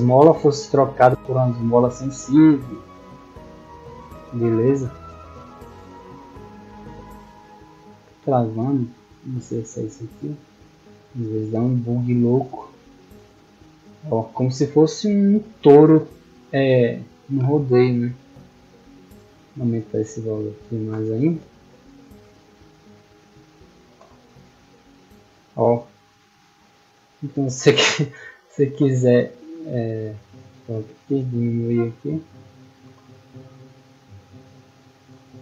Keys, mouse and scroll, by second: 2.4 middle click, 2.4 scroll down 1, 3.0 shift+middle drag, 3.4 middle click, 4.8-5.3 drag, 8.4 click, 10.3 click, 14.6 middle drag, 14.9-15.2 middle drag, 15.7 click, 16.6 click, 18.0 click, 25.1 a, 26.2 w, 31.6-32.7 drag, 33.8 w, 34.6 a, 35.1 d.